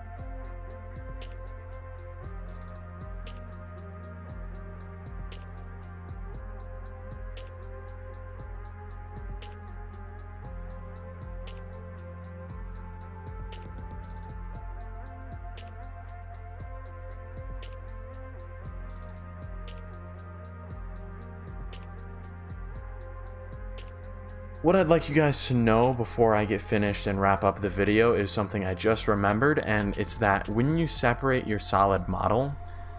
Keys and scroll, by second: 0.0-4.5 typing, 6.0-14.1 typing, 16.2-17.8 typing, 18.9-20.5 typing, 21.6-24.3 typing, 24.4 Pause, 32.1 shift+d.